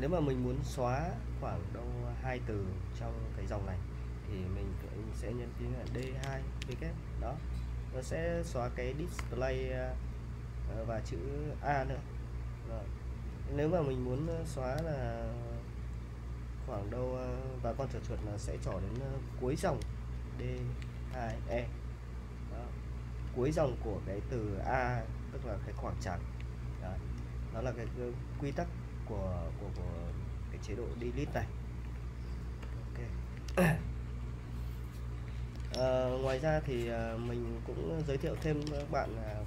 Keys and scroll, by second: 0.7-1.8 typing, 5.6-6.6 typing, 9.2 u, 20.4-23.6 typing, 27.1-30.3 typing, 31.9 j, 32.6 u, 33.5 super+Tab, 35.6 super+Tab, 36.5-38.0 typing, 38.5 super+Tab.